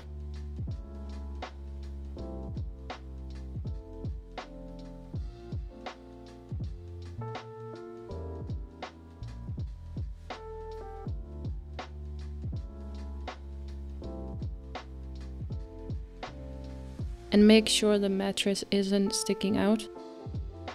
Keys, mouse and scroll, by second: 2.7-4.2 drag, 4.2-5.6 scroll up 1, 5.6-8.1 scroll up 1, 8.1-10.2 scroll up 1, 13.2 g, 14.1 middle click, 14.7-15.4 scroll down 4, 15.4-17.1 middle drag, 17.1 s, 19.8-20.7 middle drag.